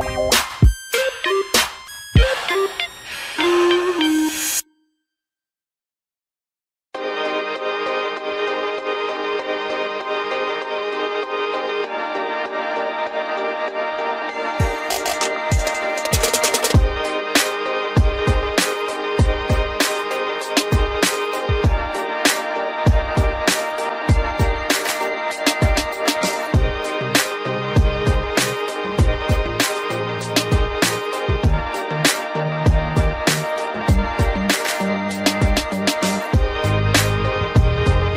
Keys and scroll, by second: 8.5 ctrl+g, 9.7 ctrl+alt+shift+e, 23.5 ctrl+g, 23.8 ctrl+shift+Caps_Lock, 24.8 ctrl+alt+shift+e, 33.5 Return.